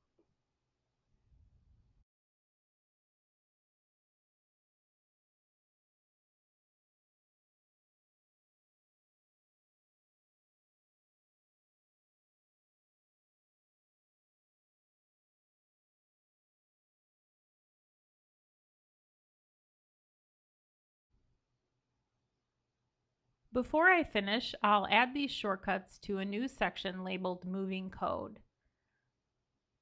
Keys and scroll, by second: 0.8 ctrl+super+Up, 3.1 ctrl+l, 4.9 ctrl+l, 5.1 ctrl+l, 5.3 ctrl+super+Up, 8.7 ctrl+super+Return, 13.1 ctrl+super+Up, 19.3 ctrl+l, 20.9 ctrl+l, 21.0 ctrl+super+Up.